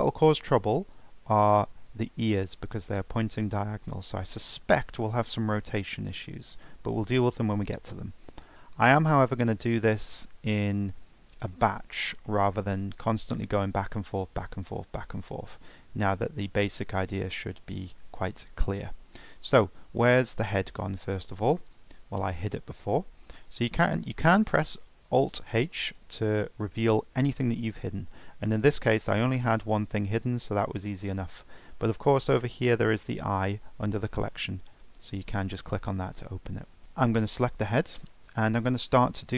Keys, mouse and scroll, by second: 0.0-0.3 scroll up 1, 0.3-3.4 middle drag, 3.5-3.9 scroll down 3, 3.9-6.2 shift+middle drag, 6.2 scroll up 1, 6.4 scroll down 1, 6.5-10.3 middle drag, 11.5-15.3 shift+middle drag, 18.3-18.6 scroll down 1, 18.6-20.5 scroll up 2, 21.7 click, 23.8-24.8 scroll down 3, 24.8-25.8 scroll up 1, 26.0 click, 27.2 alt+h, 28.5 scroll down 3, 28.8 scroll up 3, 31.2 ctrl+z, 34.9 click, 36.6-37.2 scroll up 2, 37.2 click, 37.7 scroll down 2, 39.1 click.